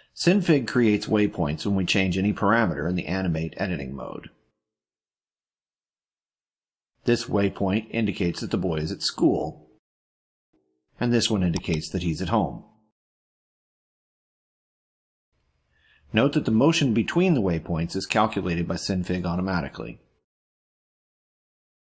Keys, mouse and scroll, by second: 11.6 click, 16.1-21.6 drag.